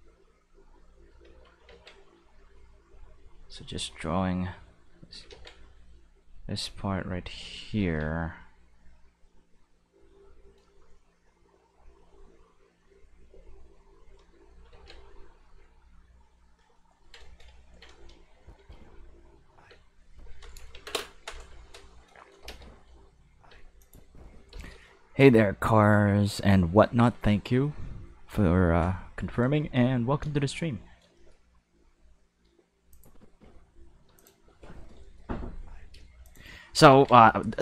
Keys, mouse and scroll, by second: 0.5 click, 1.6 ctrl+z, 2.0 click, 3.4-5.0 drag, 5.3 ctrl+z, 6.1-7.2 drag, 7.8 ctrl+z, 8.5-10.1 drag, 10.8 shift+middle click, 11.6 click, 12.8-14.1 drag, 14.7 ctrl+z, 15.4-16.4 drag, 17.1 shift+middle click, 17.6 ctrl+middle click, 18.3 click, 18.5 space, 19.7 space, 20.0 click, 20.7 ctrl+s, 22.4 space, 23.5 space, 23.8 click, 23.9 space, 24.5 space, 32.9 click, 33.2 space, 34.0 space, 34.1 click, 34.3 space, 35.0 shift+middle click, 35.9 space, 36.2 click, 36.9 ctrl+s.